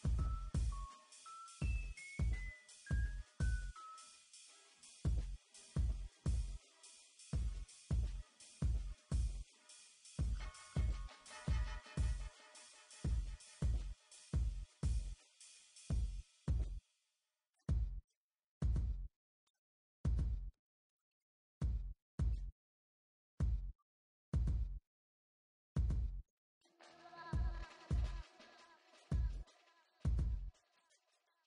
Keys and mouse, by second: 1.1 ctrl+r, 2.3 ctrl+r, 3.9 ctrl+r, 5.7 ctrl+r, 7.0 ctrl+r, 8.6 ctrl+r, 10.7-20.0 typing, 21.0 e, 21.6 Tab, 22.2-23.9 typing, 24.1 Tab, 24.7 Tab, 25.2 m, 26.3 Tab, 27.4 b, 27.9 b, 28.6 Delete, 28.8 Tab, 29.3 Tab, 29.8 Tab, 30.1 m, 30.9-31.4 drag.